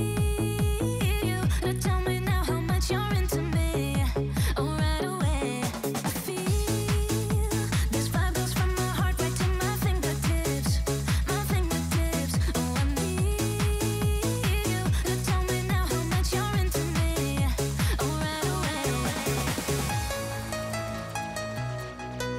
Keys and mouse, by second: 0.1 click, 0.7 KP_0, 3.9-5.3 drag, 5.6 click, 6.0-7.1 drag, 6.8 KP_0, 8.7 click, 9.3-12.5 drag, 14.5-16.8 drag, 18.6 click, 19.2 click, 19.6 ctrl+s, 19.8 click, 20.3 shift+middle click, 20.8 shift+middle click, 21.3 shift+middle click, 22.0 shift+middle click.